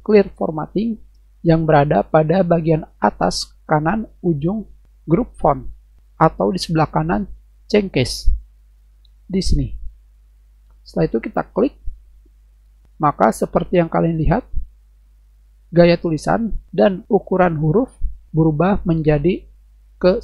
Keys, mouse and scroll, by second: 12.0 click.